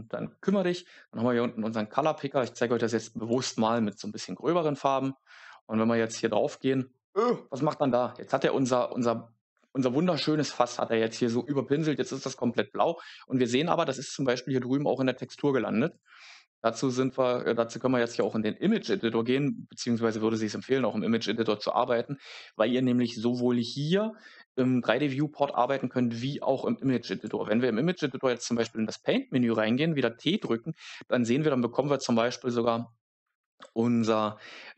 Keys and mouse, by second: 2.2 click, 3.1 click, 3.7 click, 4.0 click, 15.9-18.1 drag, 27.1-28.6 drag.